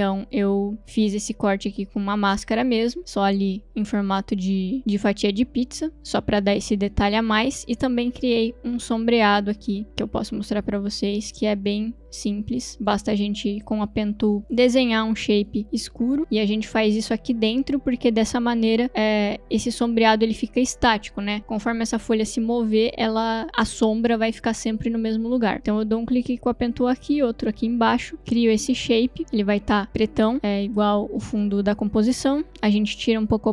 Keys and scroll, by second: 12.7 Delete, 32.6 t.